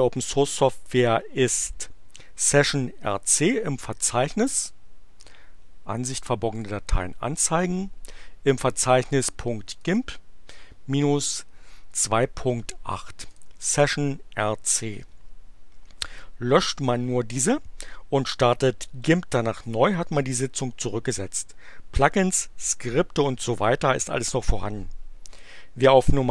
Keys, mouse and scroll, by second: 5.2 click, 6.5 click, 9.0 click, 9.7 click, 13.2 click.